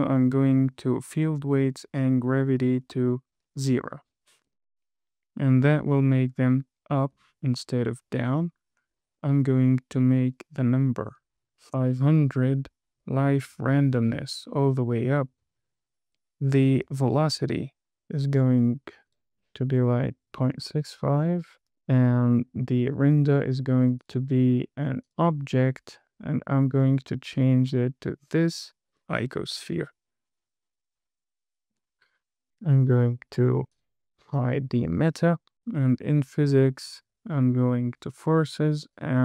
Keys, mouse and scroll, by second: 0.9 click, 1.5-2.1 scroll down 2, 2.3-4.0 drag, 4.8 space, 7.5 space, 8.6-9.7 scroll up 4, 10.6-12.1 drag, 11.9 KP_0, 14.1 click, 18.7 click, 19.4-21.6 drag, 21.7-22.3 scroll down 3, 23.2 click, 23.7 scroll down 2, 24.3-25.5 drag, 27.0 click, 28.7 click, 29.5-29.9 scroll up 2, 29.8 space, 32.2 space, 34.1 click, 36.4 click.